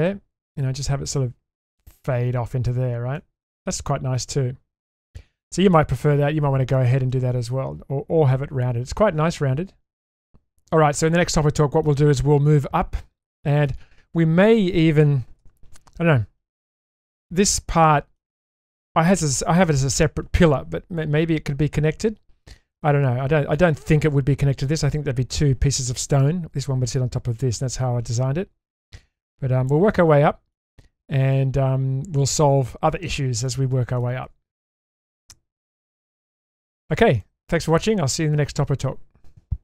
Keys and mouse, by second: 0.1-1.1 middle drag, 3.2 middle drag, 4.2-6.7 middle drag, 7.5-11.8 middle drag, 13.4 middle click, 15.4 /, 17.5-18.2 shift+middle drag, 28.1-29.7 middle drag, 29.9-30.5 shift+middle drag, 31.4-32.9 middle drag, 33.5-34.0 shift+middle drag, 34.7 shift+space, 35.2-35.8 middle drag, 36.1-36.9 shift+middle drag, 37.2-37.9 middle drag.